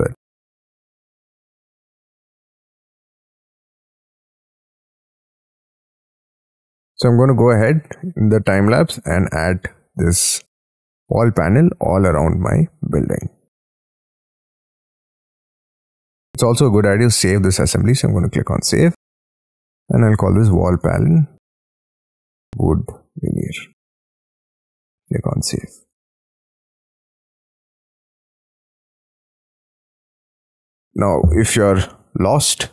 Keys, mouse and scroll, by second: 0.0 scroll up 1, 0.1-0.6 scroll down 7, 0.6 middle click, 1.4-1.9 scroll up 11, 1.9 middle click, 4.1-5.0 scroll down 13, 5.0 middle click, 5.6 scroll down 3, 5.9 middle click, 7.5 ctrl+click, 8.5 Delete, 9.2 middle click, 9.6-10.2 scroll down 7, 10.2-11.1 scroll up 4, 11.1-12.7 scroll down 25, 14.5 scroll up 5, 18.9-24.5 typing.